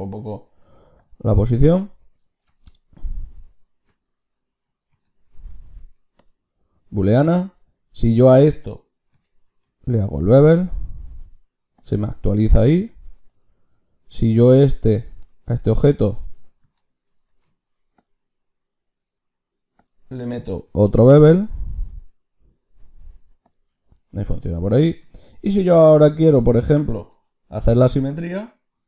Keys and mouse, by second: 0.5 s, 1.2 g, 5.2 ctrl+shift+q, 7.4-10.4 drag, 9.4 ctrl+shift+q, 12.0 click, 12.8 click, 15.1-17.2 middle drag, 17.2 ctrl+shift+q, 24.4-28.1 middle drag.